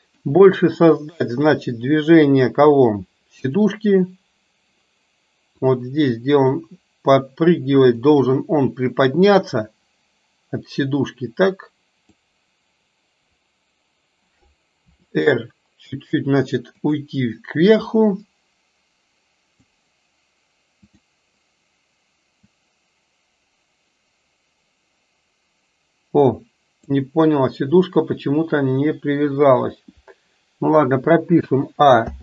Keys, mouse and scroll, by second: 5.6 click, 8.0 click, 9.5 click, 9.9-12.2 drag, 15.0 r, 18.5-19.7 drag, 20.9 click, 22.3 click, 23.2-27.1 drag, 31.5 a, 32.1 i.